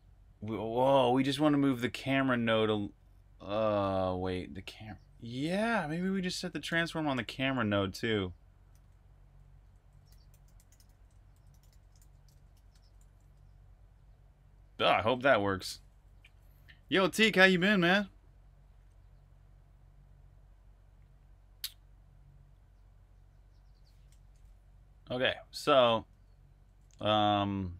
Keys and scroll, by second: 1.8 typing, 6.0-13.0 typing, 15.5-16.7 typing, 24.0 r, 26.1-27.7 typing.